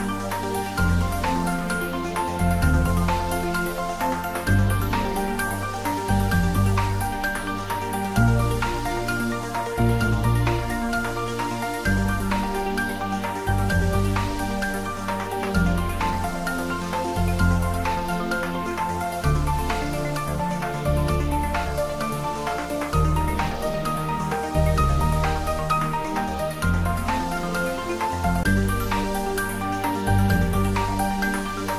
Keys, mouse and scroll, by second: 0.6 scroll down 1, 6.0 click, 10.1 click, 10.9-11.8 scroll down 1, 11.8 click, 15.4 click, 18.4 click, 19.6-20.9 scroll down 1, 20.9-21.6 scroll up 1.